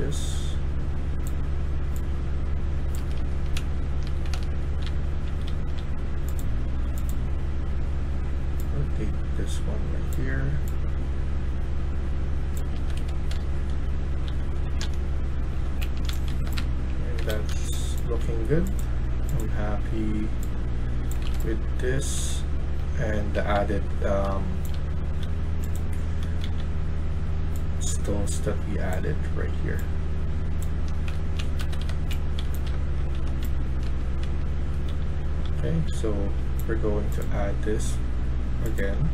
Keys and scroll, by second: 2.9 Escape, 3.1 Escape, 3.3-5.8 typing, 12.6 Escape, 12.9 Escape, 13.5-17.9 typing, 21.0-25.1 typing, 26.3 e, 30.4-33.1 typing, 31.5 Escape, 31.7 Escape, 34.3-35.9 typing, 38.8-39.1 typing.